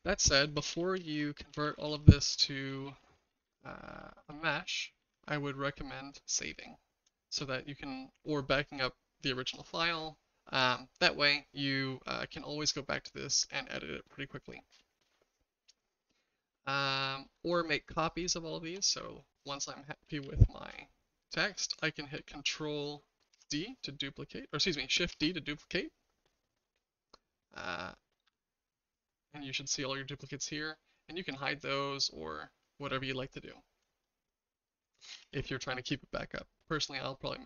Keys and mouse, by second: 0.2 ctrl+z, 0.4 ctrl+z, 0.5 ctrl+z, 0.7 ctrl+z, 1.0 ctrl+z, 1.1 ctrl+z, 1.5 ctrl+z, 1.6 ctrl+z, 1.8 ctrl+z, 1.9 ctrl+z, 2.1 ctrl+z, 2.2 ctrl+z, 2.4 ctrl+z, 2.5 ctrl+z, 2.7 ctrl+z, 2.8 ctrl+z, 3.0 ctrl+z, 3.1 ctrl+z, 3.3 ctrl+z, 3.4 ctrl+z, 3.6 ctrl+z, 3.8 ctrl+z, 3.9 ctrl+z, 4.1 ctrl+z, 4.2 ctrl+z, 4.4 ctrl+z, 4.5 ctrl+z, 4.7 ctrl+z, 4.8 ctrl+z, 5.0 ctrl+z, 5.2 ctrl+z, 7.1 shift+middle drag, 13.6-14.0 middle drag, 16.4-17.2 shift+middle drag, 18.2-18.7 shift+middle drag, 20.2 ctrl+shift+z, 23.3 ctrl+d, 25.1 shift+d, 30.9-32.0 drag, 35.1 ctrl+z, 35.3 ctrl+z.